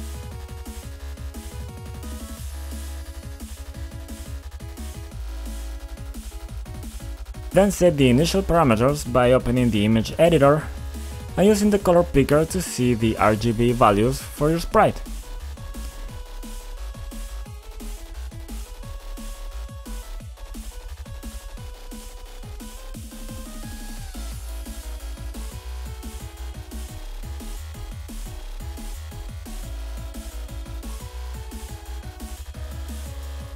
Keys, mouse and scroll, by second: 0.5-1.6 typing, 2.4 Return, 3.7 click, 9.2 click, 9.3 click, 9.4 double click, 11.2 click, 14.7 click, 16.4 click, 20.1 click, 21.3 click, 21.9 typing, 22.7 click, 26.7 click, 26.8 double click, 29.3 click, 30.0 click, 30.5 typing, 30.7 Return, 31.6 click, 32.1 typing, 32.4 Return.